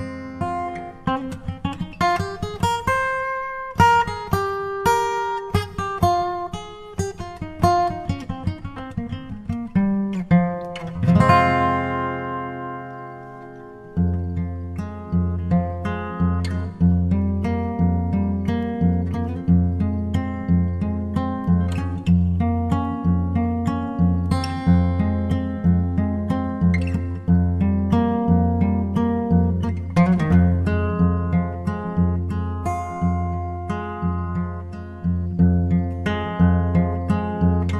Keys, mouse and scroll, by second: 5.1-8.1 drag, 8.8 Tab, 10.1-11.8 drag, 14.5-17.7 drag, 18.3-20.0 drag, 21.0-22.8 drag, 24.8-27.6 drag, 33.8-35.5 drag.